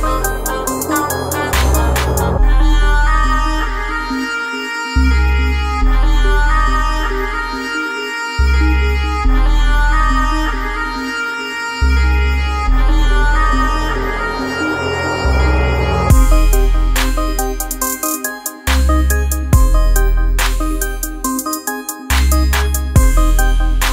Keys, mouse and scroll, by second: 0.4-3.2 drag, 6.2 click, 7.6-11.4 shift+drag, 11.9 space, 12.0 click, 12.4 space, 13.1 alt+scroll down 1, 13.5 space, 13.6 click, 14.1 space, 14.6 click, 16.7 click, 20.1 9, 22.2 shift+w, 23.4 Return.